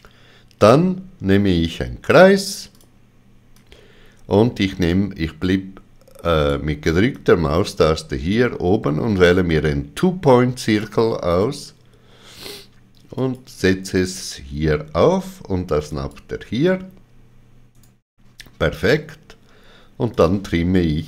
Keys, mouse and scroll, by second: 2.7 ctrl+click, 3.5 click, 7.1 click, 13.2 click, 15.9 click, 17.7 right click, 20.1 click.